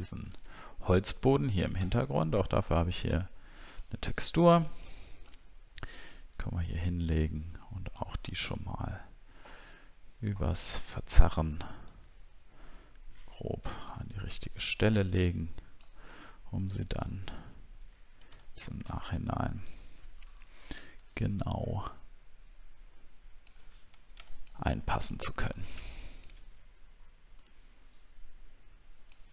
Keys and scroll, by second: 0.3 alt+Tab, 17.1 alt+scroll up 1, 19.3 alt+scroll up 1.